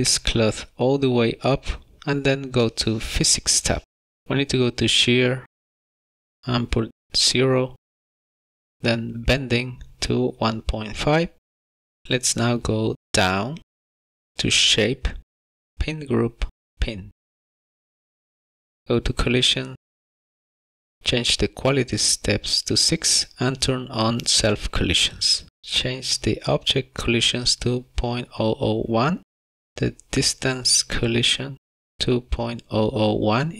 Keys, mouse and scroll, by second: 4.1 click, 5.6 click, 9.2 click, 12.5-13.9 scroll down 18, 15.6 click, 17.0 click, 19.2 click, 22.8 click, 24.6 click, 26.6 click, 29.5 KP_0, 30.1 click, 33.0 KP_0.